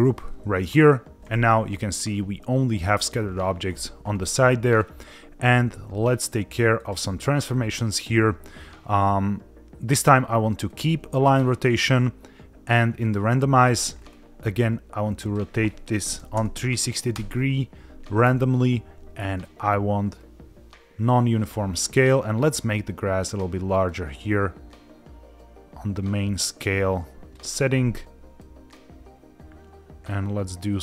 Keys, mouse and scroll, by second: 4.8-5.1 scroll down 2, 6.8 click, 7.3-9.7 scroll down 5, 10.8 click, 11.2 click, 13.0 click, 13.7 click, 13.9-15.2 scroll down 3, 15.2-17.3 drag, 19.4-21.4 drag, 23.8-27.4 drag, 28.4-30.8 drag.